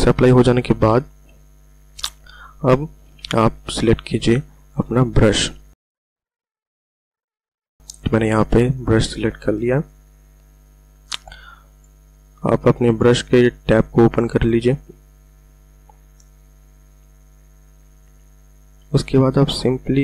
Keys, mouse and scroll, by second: 1.1 v, 4.9 b, 6.1 click, 6.4-7.5 scroll up 1, 7.5 click, 14.8-15.4 typing, 19.5 click.